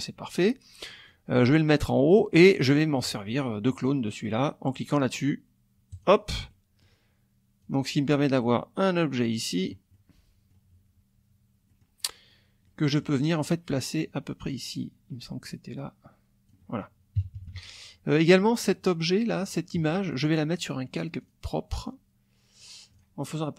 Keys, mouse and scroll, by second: 1.1-2.3 drag, 6.0 click, 6.5 middle click, 7.6-9.9 drag, 9.9 middle click, 11.7 middle click, 12.7 middle click, 14.0-16.6 drag, 17.2 KP_Subtract, 18.6 click, 19.5 click, 21.2 click, 22.9 click.